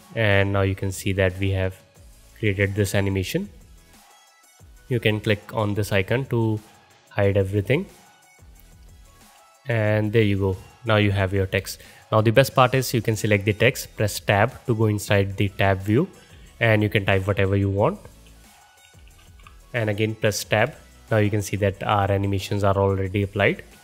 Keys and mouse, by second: 6.5-16.5 drag, 6.5 middle click, 6.5 right click, 8.0-13.0 middle drag, 8.0-13.0 right drag, 9.2 space, 10.9 space, 13.9 Tab, 15.8-16.6 typing, 18.2-19.2 typing, 20.7 Tab, 22.0 space, 23.5 space.